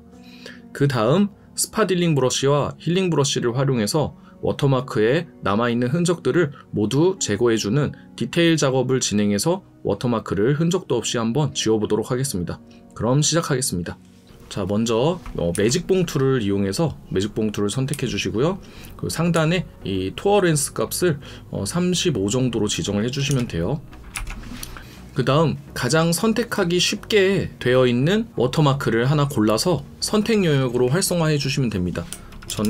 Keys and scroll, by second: 2.2 alt+space, 3.5 alt+space, 7.5 ctrl+KP_Add, 9.1 ctrl+KP_Add, 32.5 ctrl+KP_Add.